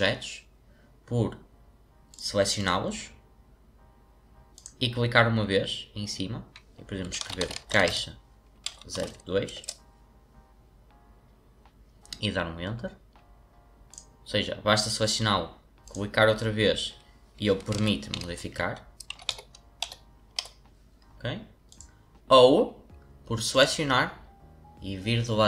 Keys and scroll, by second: 6.9-8.9 typing, 9.5 Return, 17.4-20.3 typing.